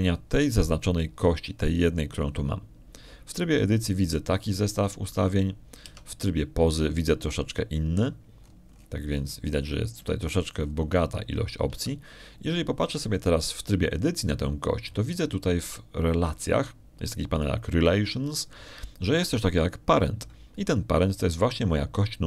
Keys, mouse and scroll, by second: 6.1-6.5 scroll down 2, 6.7 scroll up 2, 7.7 Tab, 9.8 middle click, 10.2 middle click, 10.5-10.9 scroll up 1, 11.7 middle click, 13.6 Tab.